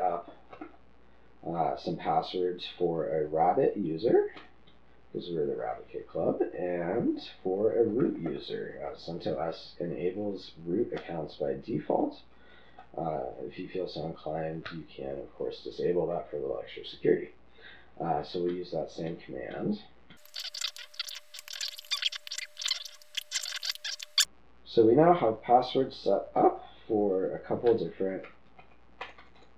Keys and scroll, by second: 4.4 typing, 5.5 typing, 8.6 typing, 10.3 typing, 11.9 typing, 13.1 typing, 19.1 typing, 20.3-24.2 typing, 26.4 typing, 27.9-29.5 typing.